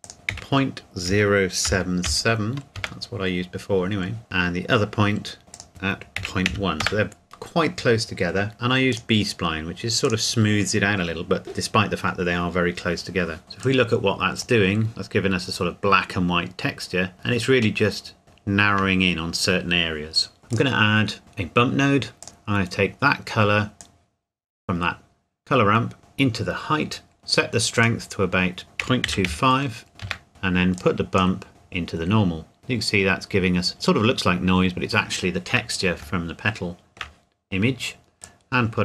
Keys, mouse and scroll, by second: 0.0 click, 0.3 KP_Decimal, 1.0 KP_0, 1.6 KP_7, 2.8 KP_Enter, 4.2 click, 6.2 KP_Decimal, 6.5 KP_1, 6.8 KP_Enter, 8.9 click, 13.4 shift+middle click, 13.6 click, 14.9 scroll up 1, 17.0 scroll up 1, 17.9 middle click, 18.2 scroll down 1, 18.5 shift+middle click, 20.5 click, 22.2 click, 28.8 KP_Decimal, 29.0 KP_2, 29.2 KP_5, 30.0 KP_Enter, 30.3 middle click, 30.8 click, 31.5 click, 33.7-34.4 scroll up 2, 36.0 scroll up 1, 36.2 shift+middle click, 38.2 click.